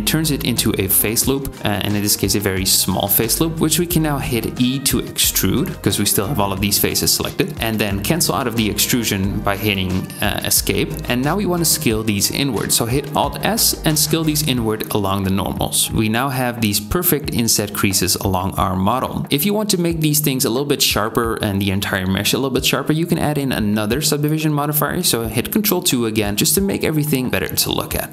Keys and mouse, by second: 2.9 e, 11.7 alt+s, 17.6 Tab, 24.7 ctrl+2.